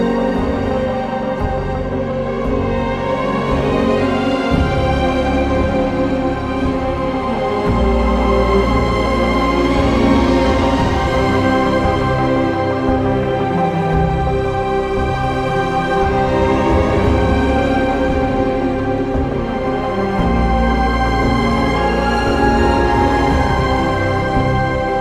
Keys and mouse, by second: 1.4 shift+click, 2.8 shift+click, 3.2 shift+click, 4.1 ctrl+r, 4.7 click, 6.5 click, 10.3 shift+click, 11.7 shift+drag, 18.2 shift+click, 20.8 middle click, 22.3 g, 22.7 x, 24.2 click.